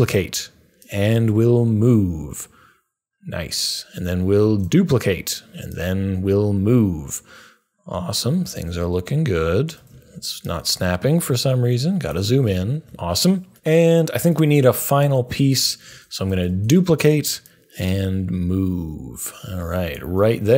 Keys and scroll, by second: 4.4 d, 16.4 super+d.